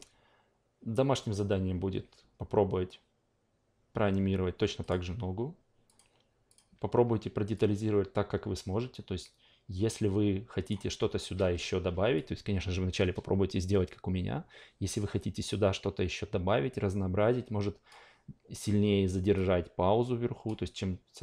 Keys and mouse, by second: 4.8 click, 5.9 click, 6.5 click, 7.5-10.9 drag, 12.1-17.9 drag, 19.3-20.4 drag, 21.1-21.2 drag.